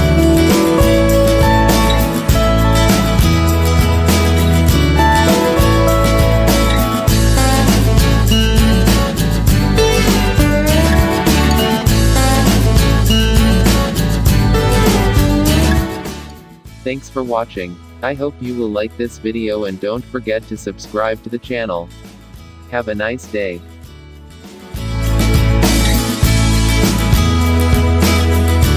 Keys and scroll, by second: 0.7 ctrl+=, 9.0 ctrl+z, 10.5 ctrl+0.